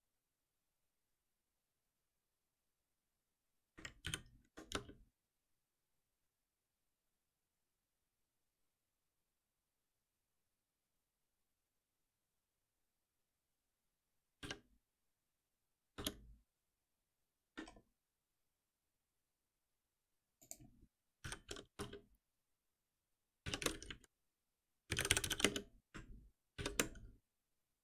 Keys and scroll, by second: 4.1 ctrl+alt+p, 14.4 F6, 21.2 ctrl+alt+n, 23.4 shift+F6, 26.6 shift+F6.